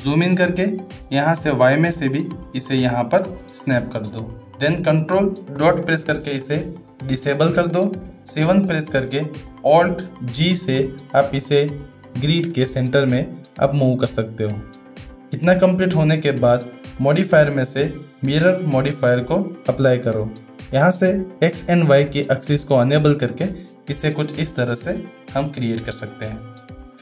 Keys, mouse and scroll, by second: 0.3-0.8 shift+middle drag, 1.8-3.4 drag, 5.6 ctrl+., 8.0 KP_7, 10.4 alt+g, 16.5 shift+middle click, 16.9-19.1 drag, 23.5-25.0 middle drag, 25.8 shift+middle drag.